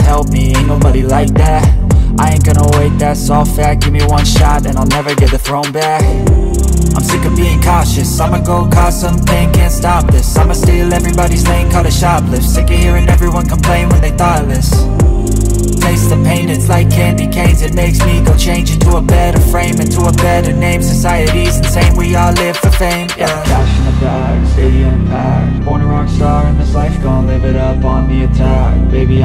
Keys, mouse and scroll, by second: 2.1 scroll down 1, 2.7 alt+click, 3.0 alt+middle click, 3.1-3.4 scroll down 2, 3.4 alt+click, 3.6 alt+middle click, 3.9 scroll up 2, 5.5 scroll down 1, 7.3-7.8 scroll down 1, 8.7 alt+click, 9.2 alt+middle click, 9.4 alt+click, 12.4 alt+click, 16.3 scroll down 1, 16.6 alt+click, 18.4 alt+middle click, 18.6 scroll up 1, 19.5 typing, 25.3 scroll down 1, 25.5 alt+click, 26.3-26.6 scroll down 1, 26.6 alt+middle click, 26.9-28.9 scroll up 1.